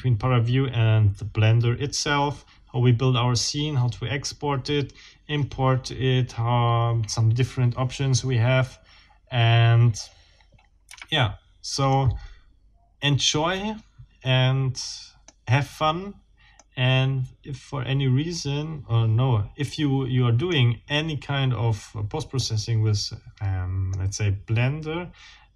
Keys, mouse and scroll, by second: 10.9 Escape, 11.9-15.5 middle drag, 16.6-20.7 middle drag, 22.4-24.1 middle drag.